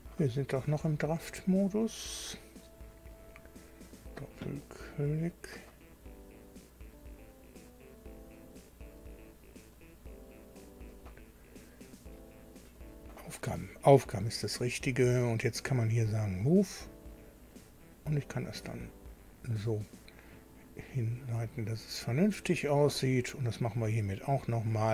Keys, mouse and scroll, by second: 3.2 click, 8.4 click, 9.0 click, 9.8 click, 10.9 click, 12.8 click, 15.9 click, 17.6 click, 19.1 click, 22.2 click.